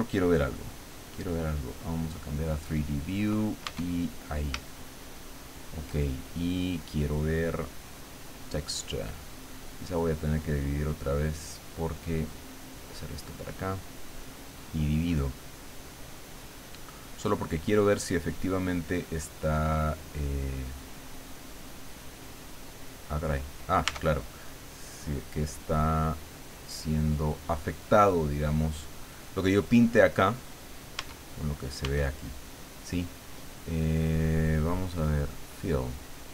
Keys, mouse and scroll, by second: 0.1 click, 0.7 click, 1.8 click, 3.6 Tab, 4.7-6.0 shift+drag, 7.3 click, 8.3 click, 10.5-13.3 drag, 13.8-16.0 drag, 16.7 click, 18.0 click, 19.2 middle click, 20.2-23.3 middle drag, 23.8 Tab, 25.6-30.2 drag, 31.0 Tab, 31.8 Tab, 33.8 click, 35.0 click.